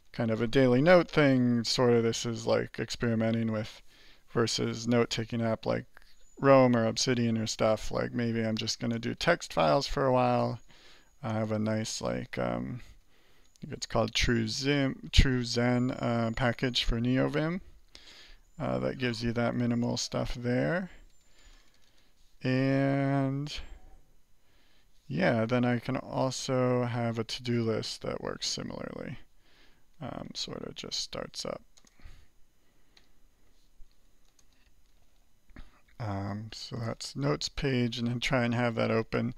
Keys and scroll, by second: 0.0-0.9 typing, 8.9 alt+Return, 10.1 alt+k, 11.3-12.4 typing, 13.0 alt+j, 18.8-19.8 typing, 21.1 BackSpace, 21.3 BackSpace, 21.4 BackSpace, 21.6 BackSpace, 26.8-27.7 typing, 31.7 ctrl+space, 32.9 z, 33.7 Escape, 34.3-38.6 typing, 36.5 alt+n.